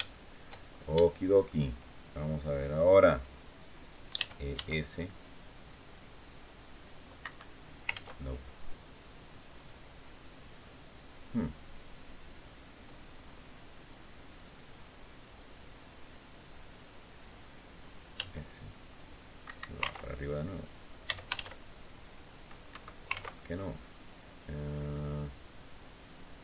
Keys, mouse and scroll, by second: 0.8 shift+middle click, 3.9 e, 4.3 s, 7.0 Escape, 7.8 ctrl+z, 9.8 scroll down 2, 10.3 scroll up 2, 17.9 s, 19.2 Escape, 20.8 s, 21.1 shift+z, 22.4 Escape, 23.6 click, 26.1-26.4 typing.